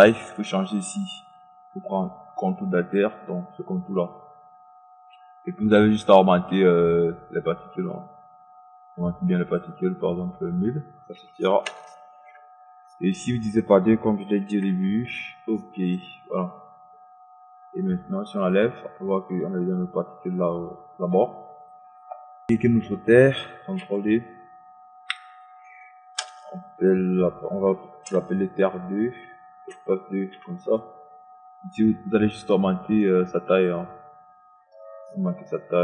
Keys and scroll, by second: 11.0 KP_1, 11.2 KP_0, 13.9 KP_5, 14.2 KP_0, 23.1 ctrl+d, 25.9 Return, 30.1 KP_2.